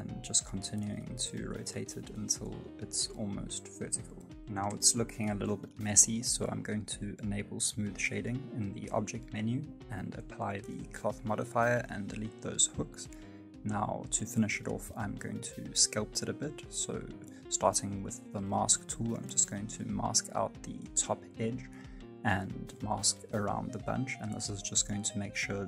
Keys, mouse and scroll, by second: 3.0 middle click, 3.5 middle click, 4.2 space, 4.5 middle click, 5.2 middle click, 5.4 shift+middle click, 5.6 right click, 5.7 middle click, 6.2 click, 7.3 middle click, 9.4 click, 9.4 right click, 9.6 x, 10.0 right click, 10.1 x, 10.6 x, 11.0 middle click, 11.3 right click, 11.4 middle click, 11.8 middle click, 13.3-13.6 scroll up 1, 13.6 click, 14.4 middle click, 15.3 click, 15.5 middle click, 18.8 middle click, 19.2 click, 19.8 click, 20.9 middle click, 21.2 click, 22.7 click, 23.4 scroll up 4, 23.5 middle click, 23.8 scroll down 2, 23.9 middle click, 24.4 alt+z, 24.7 click, 25.1 alt+z, 25.3 click.